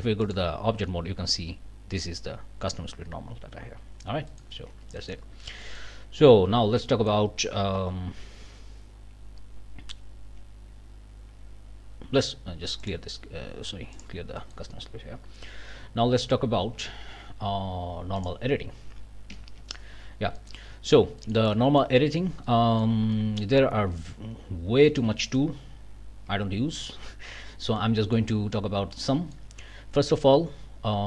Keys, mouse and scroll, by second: 0.2 click, 4.3 click, 4.7 Tab, 5.0 click, 5.3-5.6 scroll up 1, 5.6 middle click, 6.0 scroll down 1, 6.5 a, 6.9 middle click, 7.8 q, 12.8 click, 13.9 click, 14.4 click, 16.4 ctrl+alt+Up, 16.8 ctrl+alt+Down, 20.4-22.0 scroll up 9, 22.7-23.0 scroll up 2, 23.1 middle click, 23.6 scroll down 2, 24.9 alt+a, 25.2 alt+middle click, 27.3 scroll up 2, 27.8 click, 28.9 click.